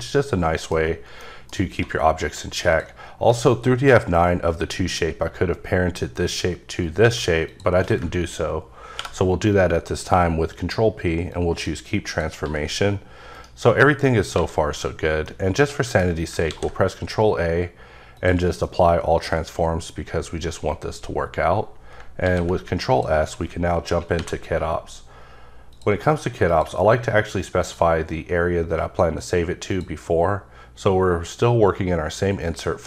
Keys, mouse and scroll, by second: 0.0-0.7 middle drag, 1.2 middle click, 2.7 click, 7.1 click, 7.4 click, 8.9 p, 11.3 click, 12.0 click, 12.4 g, 13.3 right click, 14.3 a, 15.2 middle click, 16.4 a, 18.1 click, 18.6 middle click, 22.0 ctrl+Num_Lock, 22.2 ctrl+s, 22.9 click, 24.1 n, 25.7 click, 26.5 click, 27.6 click, 29.7 click.